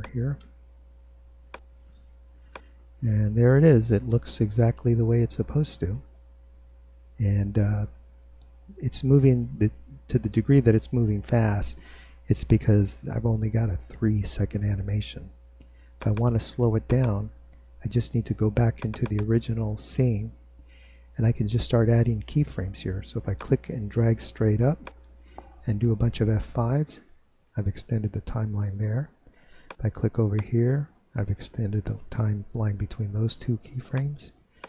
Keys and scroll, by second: 26.6 F5, 30.5 F5.